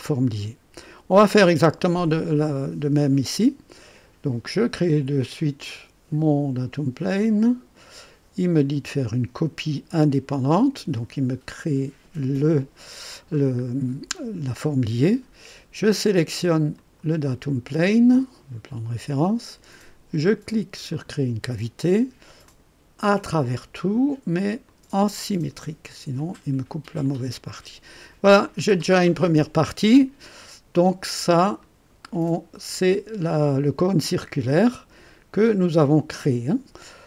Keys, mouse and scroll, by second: 3.0 click, 5.6 click, 7.1 click, 10.5 click, 13.3 scroll down 1, 16.7 click, 20.9 click, 22.4 click, 23.1 click, 24.6 click, 26.1 click, 27.0-30.3 drag, 31.5 scroll up 1.